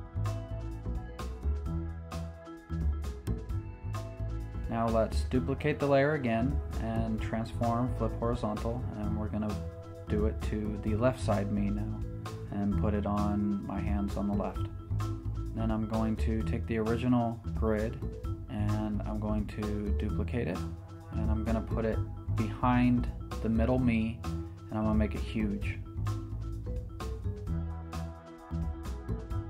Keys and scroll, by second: 2.2 Return, 3.2 v, 4.9 Left, 5.5 Down, 6.5 Up, 6.6 Left, 6.9 super+j, 7.2 super+t, 8.3 Return, 8.6 Up, 10.2 super+j, 10.7 super+t, 11.1 Return, 15.0 v, 17.9 super+j, 18.7 v, 20.4 super+t, 25.2 Return.